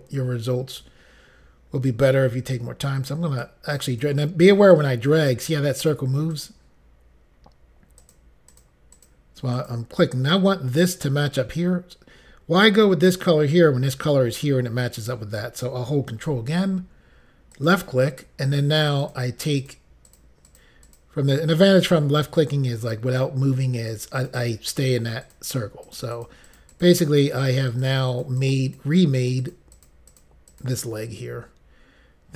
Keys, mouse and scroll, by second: 3.2 click, 3.8 click, 4.8 click, 6.4 click, 8.1 click, 8.6 click, 9.0 click, 9.1 double click, 9.6 click, 17.6 ctrl+click, 18.5 click, 19.1 click, 19.7 click, 20.1 click, 20.6 click, 21.1 double click, 22.4 double click, 22.9 click, 23.9 click, 24.3 click, 24.5 double click, 25.3 double click, 26.0 click, 26.2 click, 26.4 click, 26.6 click, 26.7 double click, 26.8 click, 27.3 click, 27.5 double click, 27.8 double click, 28.2 double click, 28.3 double click, 28.5 double click, 28.6 double click, 28.8 double click, 28.9 double click, 29.5 double click, 30.0 double click, 30.2 double click, 30.6 double click, 30.7 double click.